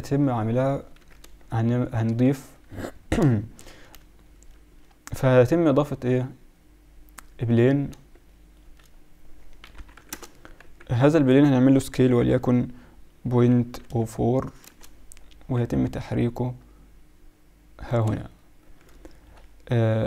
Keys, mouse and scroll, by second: 0.9 KP_1, 2.2 middle drag, 4.6 shift+a, 8.5-9.9 middle drag, 9.6 s, 10.6 z, 11.7 s, 15.5 g, 19.4 middle click.